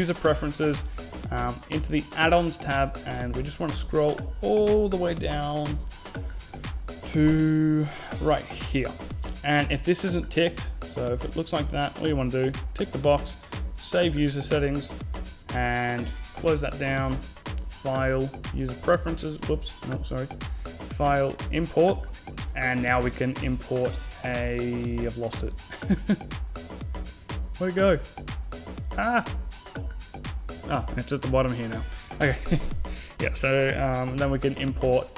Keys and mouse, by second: 16.2-17.9 drag, 19.7-21.5 drag.